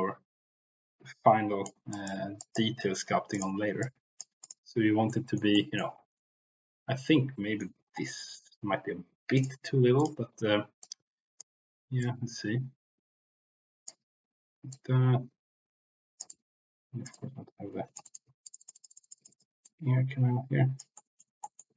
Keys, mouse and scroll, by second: 1.9 click, 2.4 click, 3.3 click, 3.8 click, 4.3 click, 5.0 middle click, 5.5 middle click, 6.1-7.6 middle drag, 8.1 middle click, 9.3 click, 9.9 click, 10.8 click, 11.9-13.9 drag, 14.7-16.2 drag, 18.0 click, 19.1 click, 19.6-20.8 drag, 20.9 middle click, 21.4 middle click.